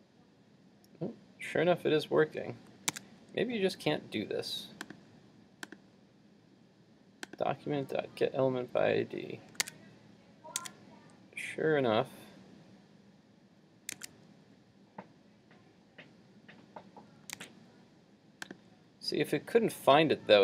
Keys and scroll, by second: 2.9 super+Tab, 9.7 super+Tab, 10.6 super+Tab, 14.0 super+Tab.